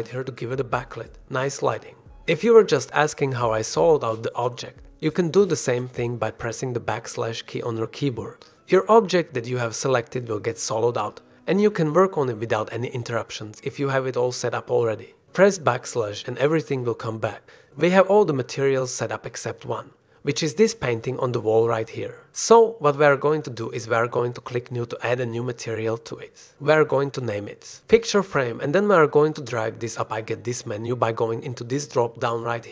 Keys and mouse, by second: 1.9 /, 2.3 click, 7.0 /, 8.0-10.9 drag, 11.1-13.7 drag, 14.2-15.4 drag, 18.2 /, 20.4 shift+drag, 21.0 click, 21.6 shift+drag, 22.7 click, 25.9 click, 26.8 click, 29.5 shift+click, 30.8-32.7 drag.